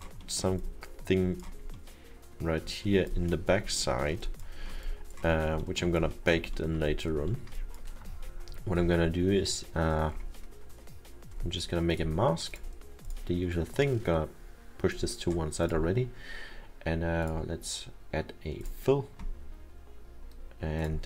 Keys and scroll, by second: 4.0 alt+7.